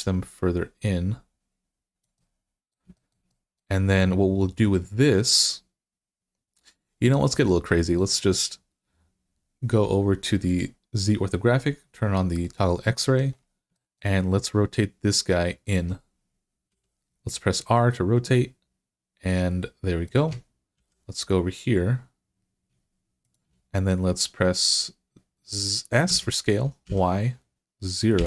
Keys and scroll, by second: 16.5 r, 20.6 g, 25.9 s, 26.7 y, 28.0 0.